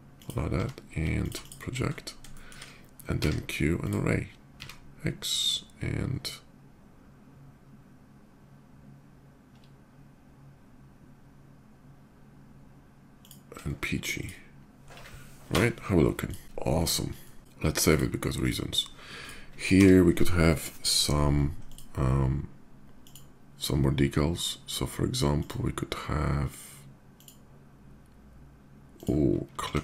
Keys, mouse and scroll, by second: 0.3 d, 1.0 alt+click, 1.2 alt+d, 2.1 shift+middle drag, 3.0 q, 3.6 click, 4.5 x, 13.0 shift+click, 13.9 shift+click, 15.3 KP_0, 16.0 click, 17.0 middle click, 17.6 shift+click, 18.2 shift+click, 18.9 click, 19.6 d, 21.4 click, 22.8 click, 25.1 click, 26.9 click, 28.7 click, 29.5 s.